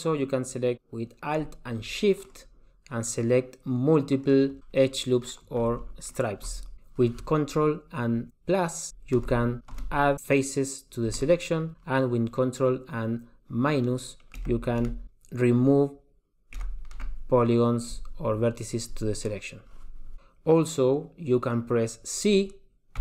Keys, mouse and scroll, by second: 2.4 alt+shift+click, 4.8 middle click, 6.2 alt+shift+click, 6.9 click, 9.4 ctrl+KP_Add, 9.9 ctrl+KP_Add, 11.3 ctrl+KP_Add, 14.6 ctrl+KP_Subtract, 15.0 ctrl+KP_Subtract, 16.8 ctrl+KP_Subtract.